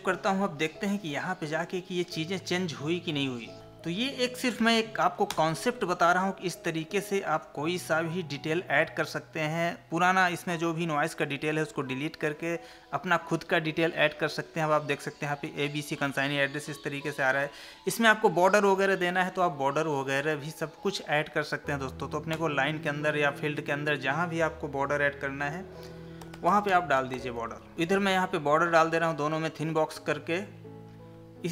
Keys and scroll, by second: 3.3 Escape, 3.6 ctrl+p, 4.6 Left, 19.8 Tab, 27.7 ctrl+v.